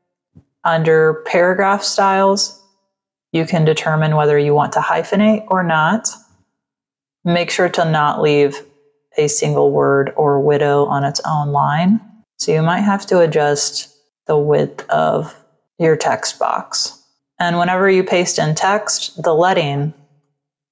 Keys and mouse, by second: 1.9 click, 4.0 click, 5.2 click, 6.1 click, 7.1 click, 11.5 ctrl+click, 13.1 click, 14.4 click, 15.6 shift+click.